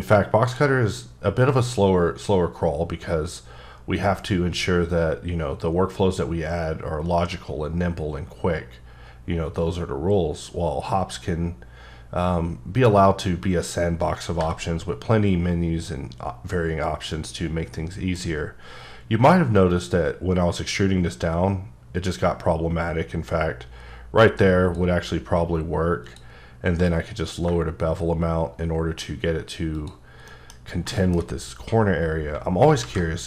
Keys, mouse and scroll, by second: 14.8 b, 15.3-16.2 scroll up 3, 17.1 click, 17.7 middle click, 18.2-18.9 scroll up 6, 19.7 click, 24.7 click, 26.0 click, 27.0 q, 27.2 click, 29.8 click, 30.3 middle click, 30.5-31.3 scroll up 7, 31.0 shift+middle drag, 32.8 alt+v.